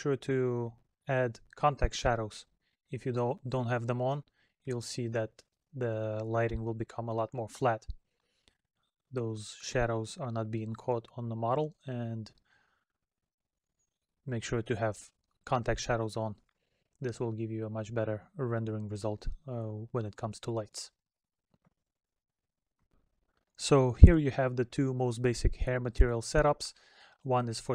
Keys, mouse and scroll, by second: 7.4 middle click, 8.6 middle click, 12.7 middle click, 17.0 middle click.